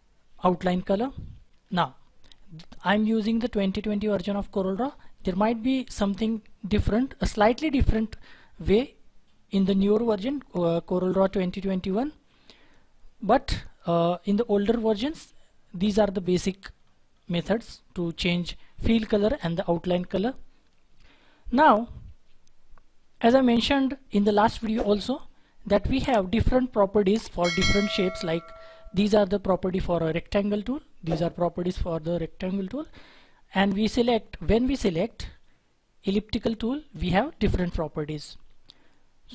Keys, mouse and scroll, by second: 1.5 shift+F4, 15.7-16.4 scroll up 1, 16.4-17.0 scroll down 1, 17.0 scroll down 1, 17.1-17.6 scroll up 1, 17.6-20.6 scroll down 1.